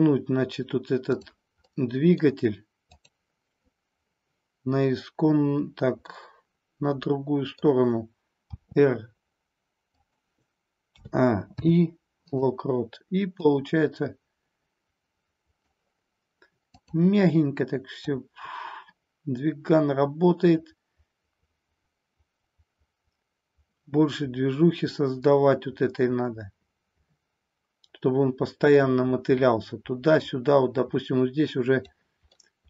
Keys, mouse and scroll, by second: 1.6-2.3 middle drag, 2.8-4.1 drag, 6.1-7.6 middle drag, 8.4 r, 10.0 click, 10.8 a, 11.5 i, 13.5-15.7 drag, 18.1-31.8 drag, 32.3-32.6 middle drag.